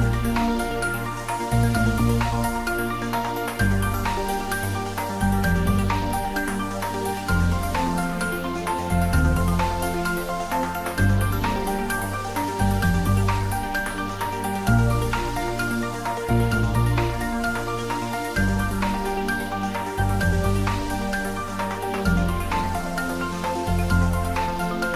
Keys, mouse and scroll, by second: 0.4 click, 2.3 3, 3.1-5.4 middle drag, 5.4 click, 8.2 ctrl+z, 10.1-11.4 scroll up 1, 11.4 click, 12.2 scroll up 1, 13.0-14.9 drag, 14.9 scroll up 1, 16.0-17.6 drag, 17.6 g, 17.8 y, 18.9 Right, 22.8 Return, 23.6 click, 24.1 scroll down 1.